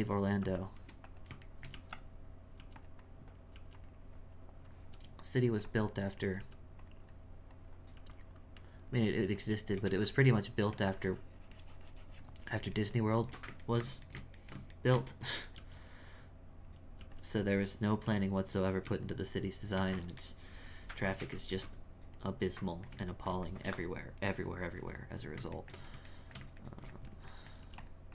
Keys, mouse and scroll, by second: 0.0-1.6 drag, 1.6 shift+middle click, 2.6 f, 3.0 click, 4.2 click, 5.7 click, 7.1 click, 8.4-9.6 drag, 9.6 shift+middle click, 10.4-12.8 drag, 12.8-15.6 shift+middle drag, 16.1 click, 17.5 click, 18.6-20.2 drag, 20.2-27.6 ctrl+middle drag.